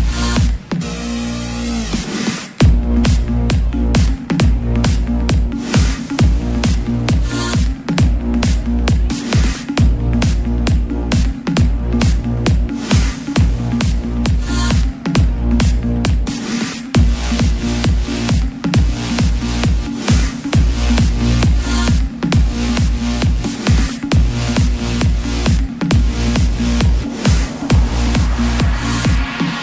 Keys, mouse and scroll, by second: 2.8 alt+click, 4.4-7.1 drag, 11.4 3, 13.1-29.6 drag.